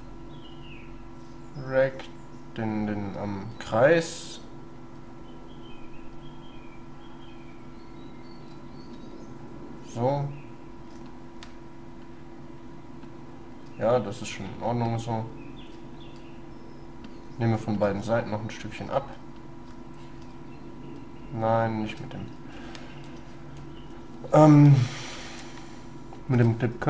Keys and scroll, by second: 0.1 shift+space, 5.0 shift+space, 8.6 shift+space, 21.2 shift+space, 23.1 ctrl+z, 23.7 ctrl+y, 26.4 space.